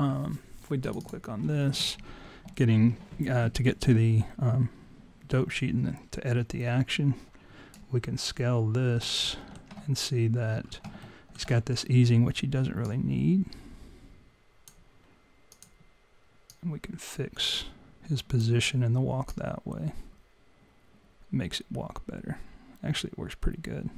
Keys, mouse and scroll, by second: 0.8 click, 1.0 click, 7.9 alt+right click, 9.3 alt+middle click, 10.0-10.4 scroll up 3, 10.7 scroll up 4, 11.0 alt+middle click, 12.8 click, 16.1 click, 16.4 click, 19.3 click.